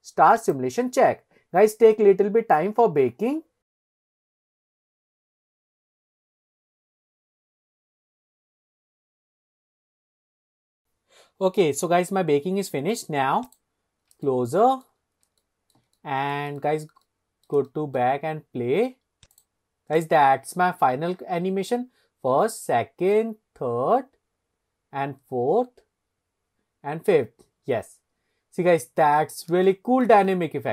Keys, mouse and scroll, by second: 0.4 click, 13.5 click, 14.0 scroll up 1, 14.3 shift+middle click, 15.4-15.8 shift+middle drag, 16.0-16.4 middle drag, 16.6 shift+middle click, 17.1 middle click, 17.7-18.0 shift+middle drag, 18.3-19.3 scroll up 1, 19.3 click, 20.0 click, 28.6-29.3 scroll up 2, 28.9 click, 29.7-30.1 shift+middle drag, 30.4 click, 30.4 middle click.